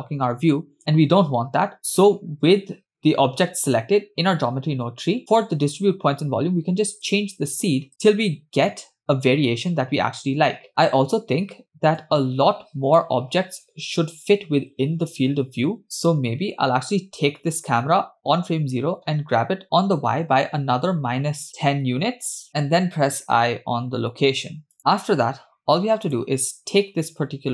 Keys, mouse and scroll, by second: 3.0 click, 7.1 click, 7.9 space, 10.7 space, 12.1-13.2 drag, 16.0 click, 19.3 g, 22.5 KP_0, 24.8 click, 24.9 KP_0, 26.1 click.